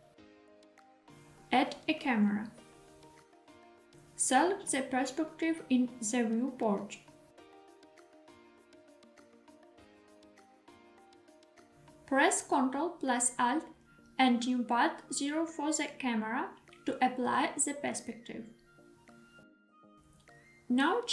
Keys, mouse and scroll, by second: 1.5 shift+a, 4.6 middle click, 5.1-5.5 shift+middle drag, 5.8 middle click, 6.7 scroll up 1, 7.0-7.4 shift+middle drag, 9.1 scroll up 1, 9.4-10.1 shift+middle drag, 10.2-11.5 middle drag, 14.2 ctrl+alt+KP_0, 20.6 g.